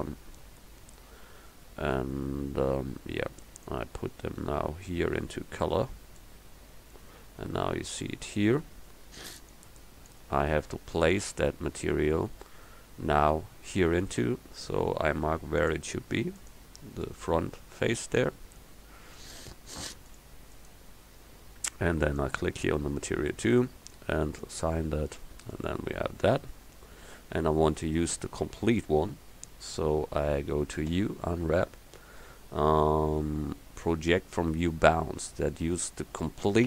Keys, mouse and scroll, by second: 3.7 click, 4.5-6.5 drag, 9.6-14.1 drag, 14.1 Tab, 17.1 click, 24.9 click, 27.1 KP_1, 31.0 u.